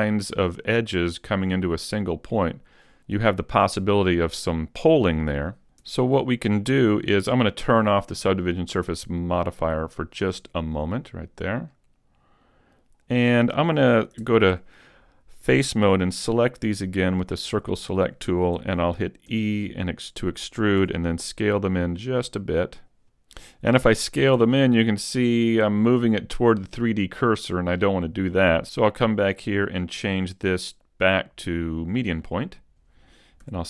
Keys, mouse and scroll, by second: 5.8 Tab, 6.7 Tab, 10.8 click, 11.7 middle click, 14.3 ctrl+Tab, 15.9 c, 17.7 right click, 19.3 e, 19.9 click, 20.9 s, 22.8 s, 24.3 right click, 25.7 click, 29.7 click, 32.0 click, 33.5 s.